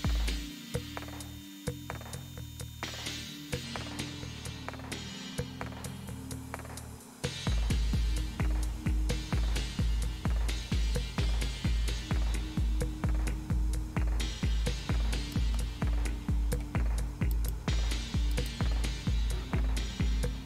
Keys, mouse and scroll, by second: 3.9 super+Right, 7.6-8.8 scroll down 1, 8.9-15.3 scroll down 1, 15.3-16.6 drag, 17.4 right click, 18.3 click.